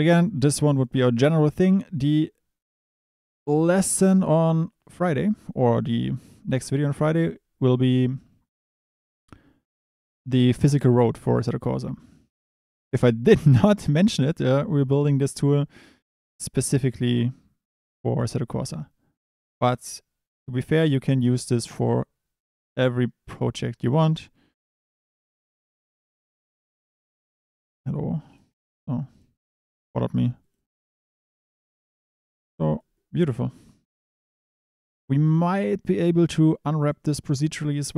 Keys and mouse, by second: 0.4 click, 5.5 click, 5.8 click, 6.8 click, 27.1 click, 27.2 Tab, 27.9 g, 28.3 click, 28.5 Tab, 30.5 click, 32.1 click, 35.2 click, 35.3 Tab, 36.1 Tab, 36.8 click, 37.6 click.